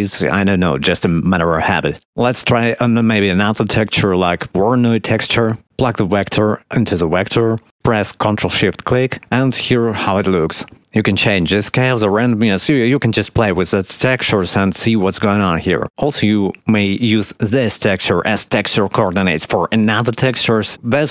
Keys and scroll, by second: 3.7 shift+a.